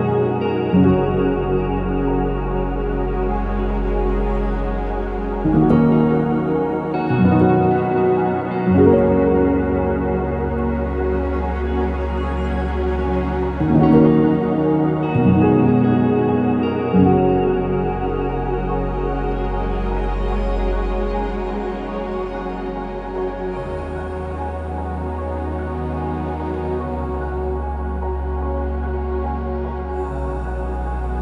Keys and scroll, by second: 0.3-1.2 typing, 6.7 Return, 6.7-8.6 typing, 11.7-12.4 typing, 13.8 BackSpace, 13.8 BackSpace, 14.0 BackSpace, 16.2 BackSpace, 16.7 BackSpace, 22.8 ctrl+s, 25.2 6, 25.2 Return, 25.5 0.